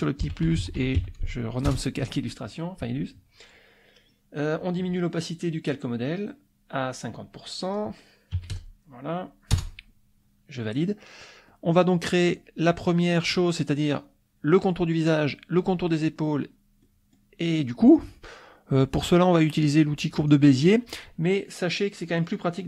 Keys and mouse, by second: 0.0-1.5 typing, 1.7 Return, 5.2 click, 7.4 click, 8.3 KP_5, 8.5 KP_0, 9.5 Return, 10.8 click, 11.5 click, 16.8 click, 20.2 click.